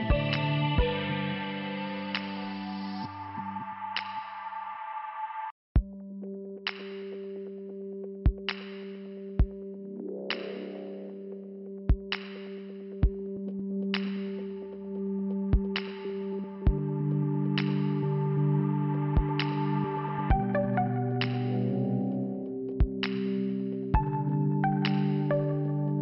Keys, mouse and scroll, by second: 0.5 middle click, 1.5 scroll up 1, 2.9 click, 4.3 click, 6.7 click, 7.9 click, 9.4 click, 10.6 click, 11.9 click, 14.5 click, 15.5 click, 21.9 middle click.